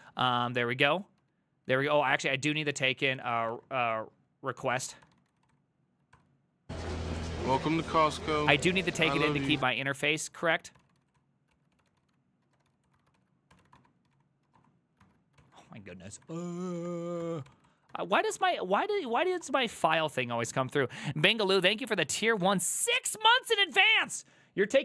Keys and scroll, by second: 0.0-19.9 typing, 7.7 ctrl+c, 7.8 ctrl+c.